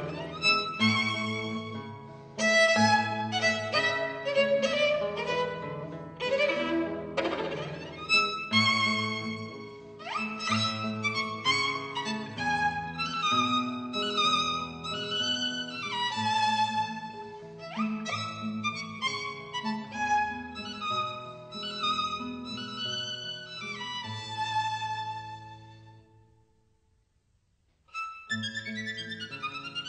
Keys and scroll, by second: 0.4 super+z, 3.6 super+z, 6.8 super+z, 13.4 super+z, 13.8 super+z, 14.2-15.0 typing, 22.7-24.2 typing, 27.0 b, 28.0 super+z.